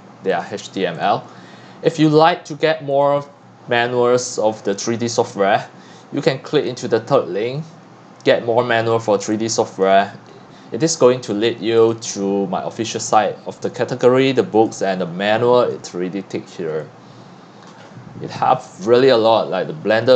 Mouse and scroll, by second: 0.3-5.1 drag, 5.1-6.7 middle drag, 5.1-6.6 scroll down 3, 6.6 scroll down 2, 6.7-14.8 drag, 14.8 scroll down 1, 14.9 middle click, 14.9 scroll, 15.1-16.8 scroll down 1, 16.8-20.1 middle drag, 16.8-19.0 scroll, 19.3 scroll up 2, 19.4 scroll down 1.